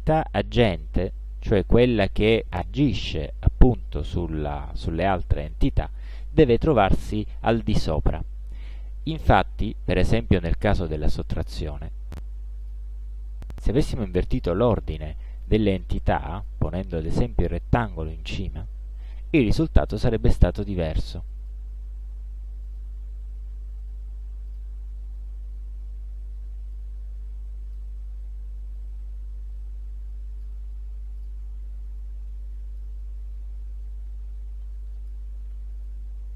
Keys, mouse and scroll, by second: 11.7-12.5 drag, 13.0 ctrl+d, 13.2-14.7 ctrl+drag, 15.5 click, 16.4 click, 17.8 click, 19.1 shift+click, 21.5 click, 22.7 click, 24.6 click, 26.8-28.0 drag, 28.8-30.7 drag, 31.2 click, 32.1 click, 33.5 ctrl+d, 33.9-35.3 ctrl+drag, 35.6 ctrl+d, 35.9-36.3 ctrl+drag.